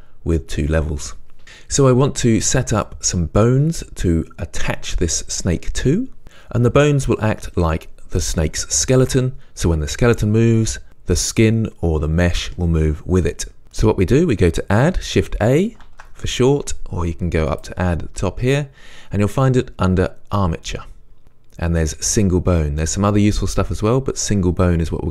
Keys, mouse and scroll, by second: 15.9 shift+a, 17.5-25.1 drag.